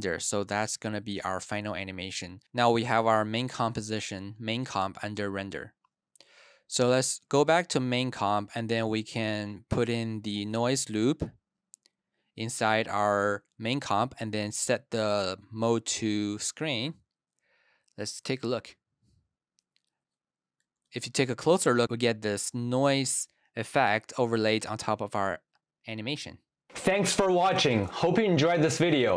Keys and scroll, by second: 0.4 Return, 0.6 Right, 0.9 Left, 1.1 Left, 18.2 space, 20.6 super+=, 23.0 super+-.